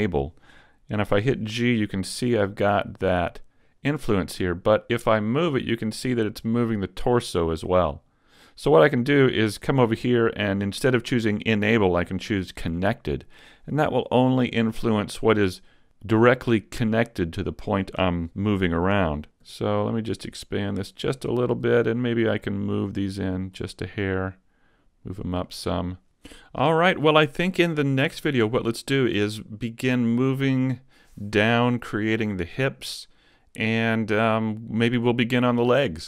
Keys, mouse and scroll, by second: 1.2 g, 8.0 right click, 9.5 click, 14.0 g, 17.6 right click, 19.5 g, 21.3 right click, 22.1 middle click, 23.1 click, 24.2 click, 25.5 middle click, 26.5 Tab.